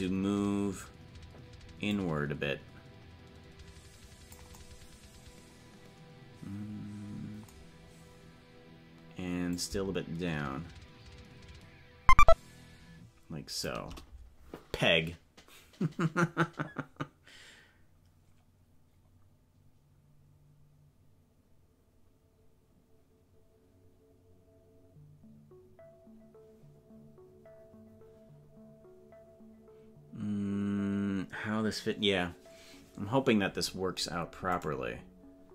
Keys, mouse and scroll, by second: 1.9-4.3 drag, 9.5-13.7 drag.